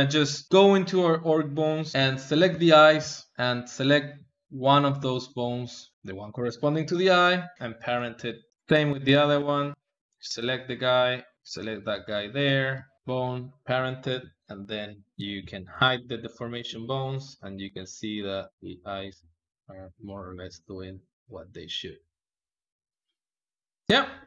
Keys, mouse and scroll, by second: 0.0-1.9 ctrl+middle drag, 1.9 g, 2.4 ctrl+Tab, 2.4 middle click, 3.3 shift+click, 4.2-6.7 ctrl+middle drag, 5.0 ctrl+Tab, 6.7 ctrl+p, 8.1 shift+middle click, 8.7 click, 10.0 ctrl+Tab, 10.3 click, 11.2 shift+click, 12.2 ctrl+Tab, 12.7 shift+click, 12.9 ctrl+p, 13.3 ctrl+middle click, 13.9 n, 14.4 middle click, 15.0 click, 15.1 KP_1, 15.6 shift+click, 16.5 g, 23.9 KP_1.